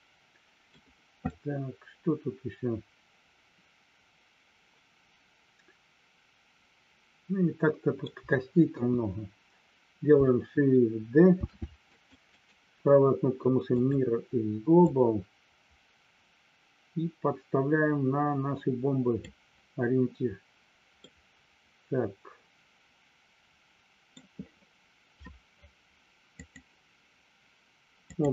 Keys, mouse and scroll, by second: 1.3-7.9 middle drag, 8.7 KP_1, 11.3 shift+d, 11.8 click, 14.8-19.2 drag, 21.0-24.2 middle drag, 26.4-28.3 drag.